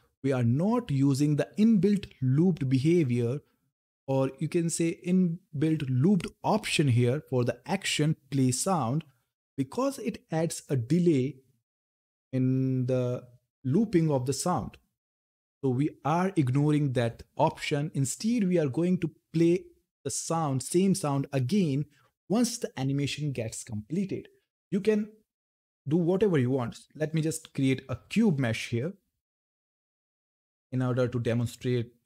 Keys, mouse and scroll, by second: 0.8 click, 18.4 click, 18.5 click, 25.3 click, 28.8-32.0 drag.